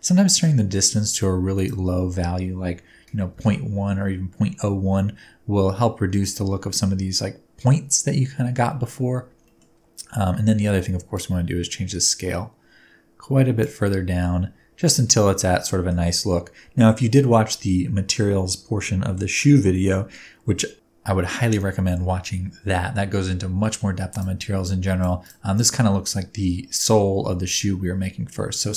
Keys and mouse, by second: 1.6-4.6 middle drag, 8.7 middle click, 9.5 middle click, 11.2-13.6 middle drag, 15.8 shift+middle click, 18.1-19.2 shift+middle drag, 19.3-24.6 middle drag, 24.6-25.0 drag, 25.0-28.7 middle drag.